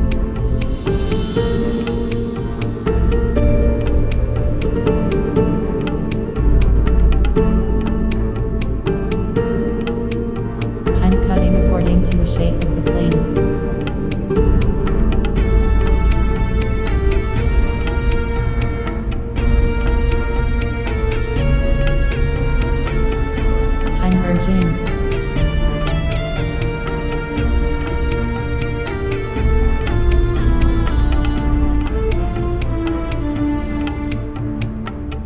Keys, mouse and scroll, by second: 0.8 g, 1.9 right click, 2.6 click, 5.1 Tab, 6.1 KP_1, 7.5-9.4 right drag, 8.0 Tab, 9.2 a, 9.5 a, 11.1-13.9 drag, 13.5 Delete, 15.1 z, 15.6 Tab, 17.6 Tab, 18.6-22.1 right drag, 20.7 space, 23.8-25.7 middle drag, 24.7-26.4 right drag, 25.4 space, 27.0 Tab, 30.4 right click, 31.4 KP_7, 34.6 z.